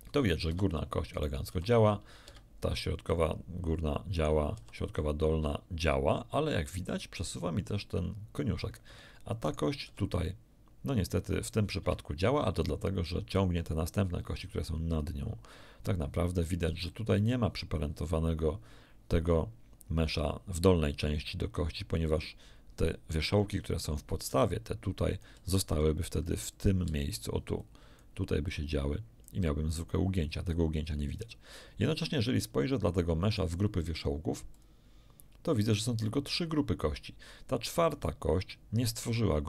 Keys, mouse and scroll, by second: 0.4 Escape, 1.1 right click, 1.5 r, 2.2 Escape, 4.1 right click, 4.5 r, 8.8 Escape, 9.4 right click, 11.7 Escape, 16.4 right click, 16.7 r, 17.1 click, 24.2 d, 24.4 click, 24.5 d, 26.1 click, 26.8 d, 26.9-28.1 drag, 27.1 d, 28.4-29.4 drag, 33.3 click, 34.5 click, 37.9 click.